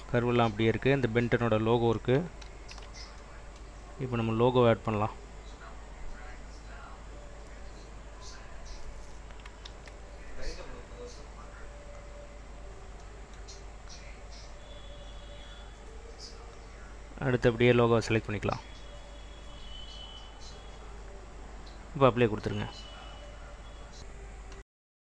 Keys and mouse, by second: 2.6 ctrl+z, 4.9-7.0 drag, 8.4 click, 9.9 ctrl+s, 11.2 click, 16.5-20.1 drag, 21.7-24.1 drag.